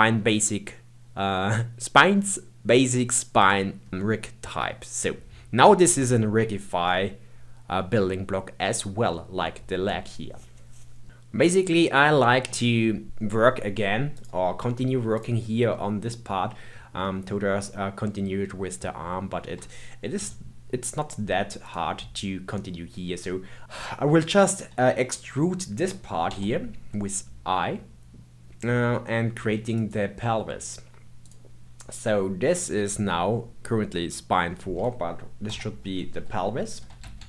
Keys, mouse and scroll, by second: 9.1-14.1 middle drag, 14.1-15.7 drag, 15.7 middle click, 16.5-17.0 scroll down 2, 17.0 middle click, 17.8-19.2 scroll up 1, 19.2 scroll up 1, 20.1 KP_1, 21.6 click, 26.2 e, 31.2 click, 35.4 F2.